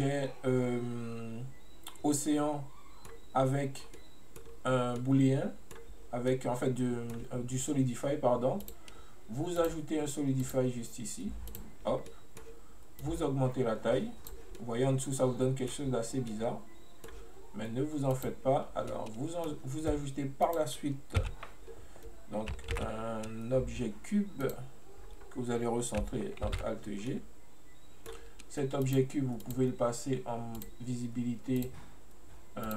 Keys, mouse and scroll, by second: 3.9 scroll down 1, 4.0-4.5 middle drag, 4.5-5.0 scroll up 1, 5.0-8.7 middle drag, 8.7 click, 9.6 click, 10.5-12.1 drag, 12.1 scroll down 1, 12.1 middle click, 13.1-14.7 drag, 14.7-16.3 middle drag, 16.3 scroll down 1, 16.4-18.2 middle drag, 18.2 click, 19.0-20.6 middle drag, 20.6-21.3 drag, 21.3 n, 21.8-22.9 scroll up 1, 22.9 shift+a, 27.1 scroll down 1, 27.2-28.9 middle drag, 28.9 click, 30.6-32.7 drag.